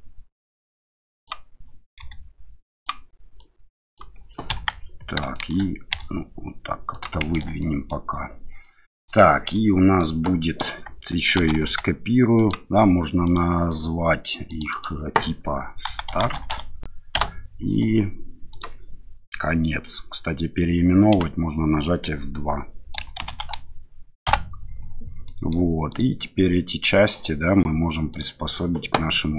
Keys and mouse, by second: 1.1 click, 2.0 s, 2.7 click, 3.4 click, 4.5 KP_1, 5.3 shift+middle click, 5.9 e, 6.9 click, 7.3 Tab, 7.6 middle drag, 8.6 middle click, 9.5-10.0 middle drag, 11.4 shift+d, 11.6 x, 12.4 click, 13.2 click, 14.5 click, 14.7-17.6 drag, 18.5 click, 21.1 F2, 25.2 middle drag, 25.9 click, 28.1 click.